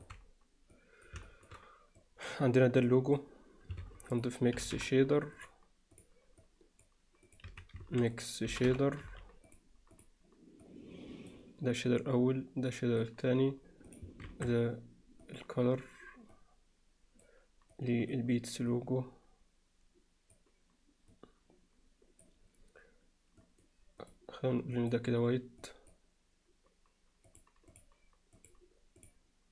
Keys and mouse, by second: 0.8 click, 1.3 alt+shift+middle click, 2.0 click, 2.9-3.2 drag, 3.8 shift+a, 6.4 click, 7.3 click, 7.8 x, 7.8 shift+a, 10.7 click, 12.0-13.1 drag, 13.9 click, 14.3 shift+d, 16.4 click, 17.7 click, 18.7-20.4 drag, 21.1-22.3 drag, 23.4 drag, 24.0 click, 27.3-27.8 drag, 28.4-29.1 drag.